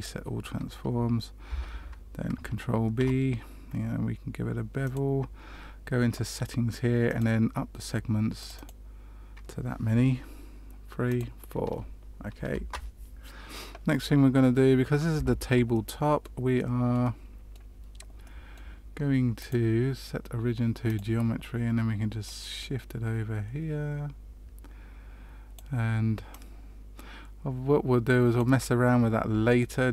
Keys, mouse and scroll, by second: 1.4 Tab, 3.0 ctrl+b, 7.0 click, 8.3 click, 8.5 click, 11.0 click, 12.4 Return, 15.1 Tab, 15.7 middle click, 16.5 middle click, 17.0 middle click, 18.2 middle click, 19.3 click, 22.2 click, 26.2 click, 29.5 shift+middle click.